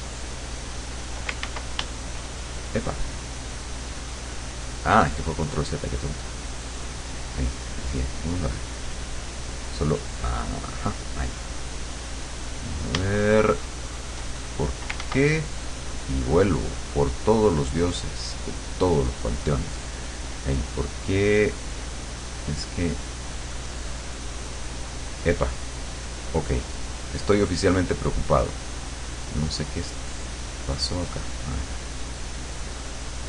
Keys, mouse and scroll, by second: 0.8 click, 1.5 ctrl+z, 3.8 click, 5.1 click, 5.9 click, 7.0 click, 8.4 click, 10.4 click, 13.3-14.3 shift+drag, 15.0 ctrl+z, 16.7 click, 17.9 click, 18.8 click, 21.8 click, 22.2 click, 23.4 click, 26.0 click, 27.0 click, 27.8 click, 28.9 click, 30.0 click, 32.2-33.2 drag.